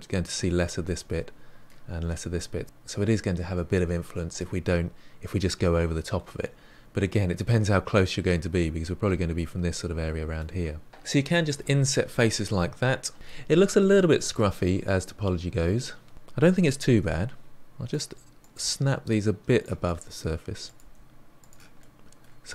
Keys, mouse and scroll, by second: 0.3-2.6 middle drag, 6.8-7.5 scroll down 4, 7.5-10.5 middle drag, 10.6-11.4 scroll up 5, 11.4-16.1 middle drag, 16.1 click, 16.9 g, 18.3 click, 18.6 g, 19.8 middle click, 20.6 click, 20.8 g, 21.7-22.5 middle drag.